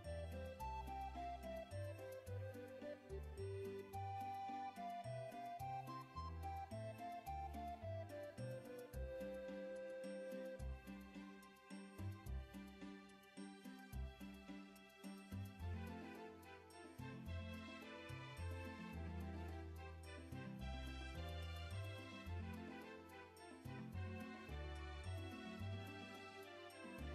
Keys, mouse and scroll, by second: 0.5 ctrl+click, 2.1 ctrl+click, 2.4 click, 3.6 click, 5.5 click, 7.7 alt+click, 8.6 click, 10.5 click, 13.0 ctrl+click, 14.6 ctrl+alt+z, 16.3 ctrl+click, 20.2 ctrl+click, 22.5 ctrl+click, 26.9 click.